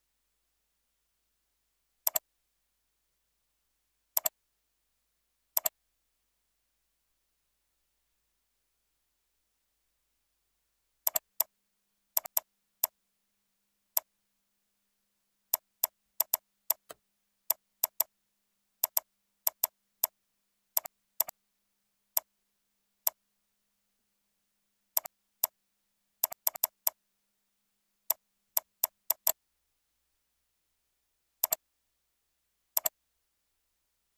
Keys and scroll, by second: 7.1 shift+F3, 9.5 ctrl+shift+., 10.6 ctrl+b, 11.7 ctrl+shift+., 12.0 ctrl+b, 13.3 ctrl+Left, 15.1 ctrl+Left, 16.1 ctrl+c, 16.5 ctrl+v, 16.8 ctrl+a, 21.0 ctrl+Tab, 23.4 ctrl+shift+,, 24.8 ctrl+b.